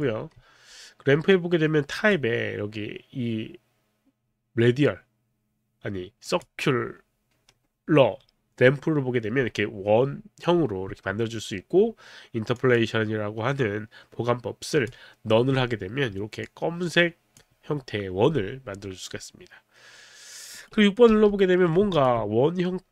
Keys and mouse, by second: 1.9 click, 6.2 click, 12.6 click, 14.7 click, 16.5 click, 20.6 right click, 21.1 6, 22.0 alt+click.